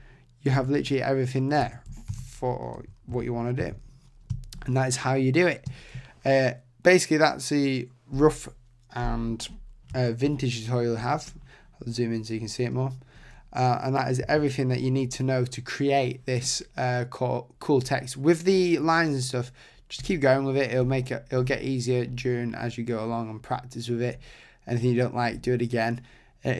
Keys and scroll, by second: 0.5 Tab.